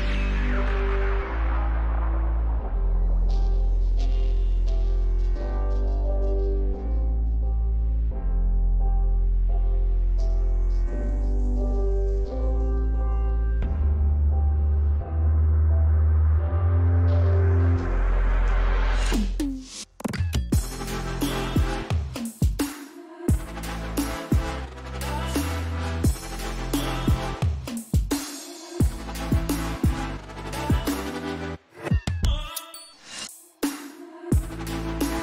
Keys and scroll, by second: 23.4 ctrl+z, 24.1-29.5 typing.